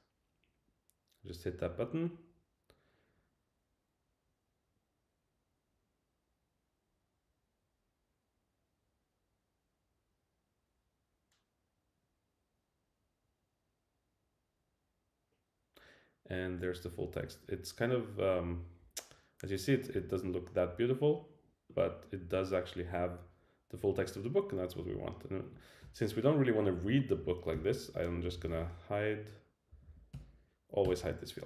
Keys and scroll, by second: 27.5 super+k, 29.7 Down, 30.1 Return.